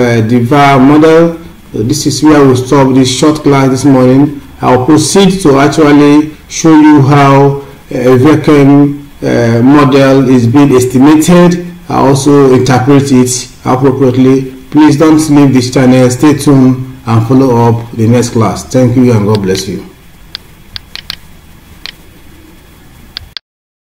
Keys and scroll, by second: 2.8 Down, 5.1 scroll down 1, 6.5 Down, 6.6 scroll down 1, 8.3 scroll down 1, 13.2 Up, 14.2 scroll up 1, 14.9 Down, 15.9-17.8 scroll down 1.